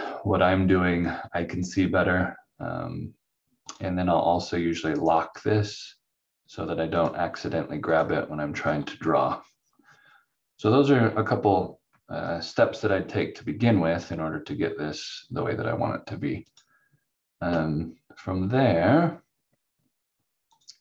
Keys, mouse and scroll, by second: 3.6 click, 5.0 right click, 7.0 click, 16.4 click, 20.5 click.